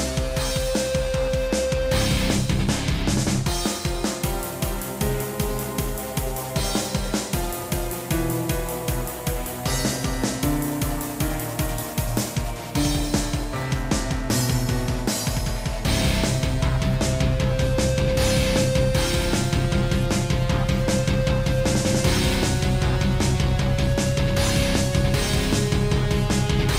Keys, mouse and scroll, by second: 0.6 click, 1.4 click, 2.6 i, 3.2 click, 4.8 click, 6.7 i, 8.0 click, 8.1 click, 9.1 click, 10.3 i, 11.2 click, 13.3 click, 14.9 shift+click, 15.5 shift+click, 15.5-15.9 scroll down 1, 15.9 shift+middle click, 16.2-16.6 scroll up 2, 17.4 i, 18.1 click, 18.9 scroll down 1, 20.3 click, 24.3 shift+click, 24.9 shift+middle click, 25.5 i.